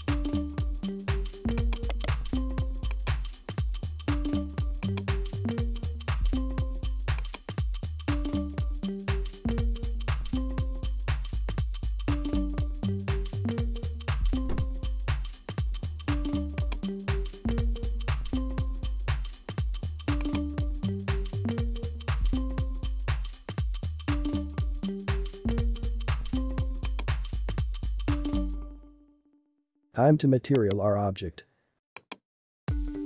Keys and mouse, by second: 0.0 g, 1.8 right click, 2.9 click, 3.3 space, 4.9-7.2 drag, 7.3-9.7 drag, 15.7 space, 16.5 click, 20.5 click, 26.8 click, 29.1-30.6 drag, 30.6 right click, 32.0 click.